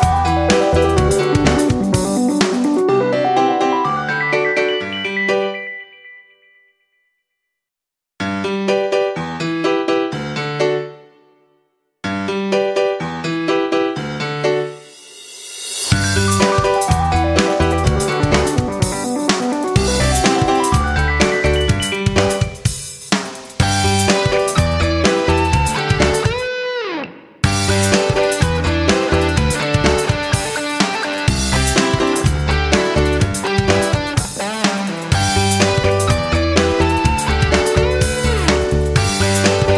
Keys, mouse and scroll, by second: 1.5 ctrl+shift+Up, 3.0-7.4 drag, 8.0 shift+Up, 8.5 Up, 8.7 Up, 10.3 click, 13.9 ctrl+z, 15.1-21.0 drag, 22.5 right click, 23.8-39.7 drag.